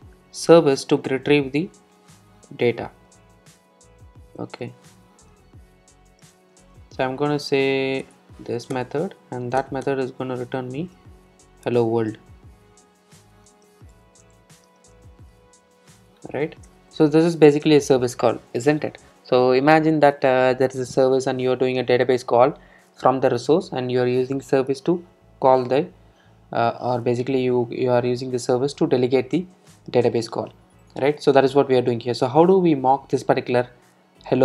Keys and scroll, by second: 1.7 super+v, 8.1 alt+Return, 10.8 super+z, 16.4 super+s, 17.3 super+e.